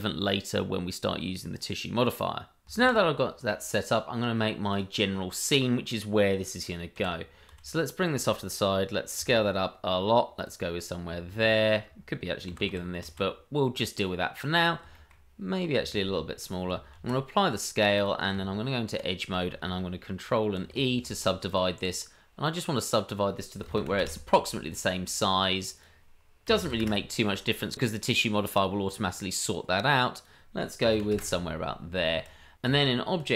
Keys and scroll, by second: 2.8 shift+a, 4.8 shift+a, 6.9 g, 9.2 s, 11.7 s, 12.5 g, 15.1 g, 16.0 s, 16.9 ctrl+a, 18.3 Tab, 20.6 ctrl+?, 20.8 ctrl+e, 32.7 Tab.